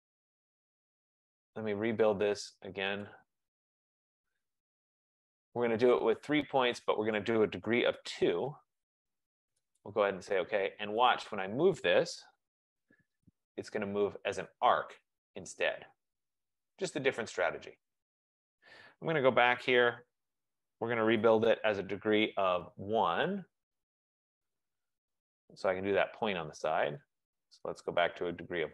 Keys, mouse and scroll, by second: 0.3-1.8 typing, 3.1 click, 3.1-4.2 typing, 7.3 click, 7.8-8.1 typing, 9.9 click, 11.3 click, 11.8-12.9 typing, 13.3 click, 16.5-18.9 drag, 19.5 Escape, 21.0-22.4 typing, 24.7 click, 25.3 Return, 27.4 click, 28.2 click, 28.3 typing.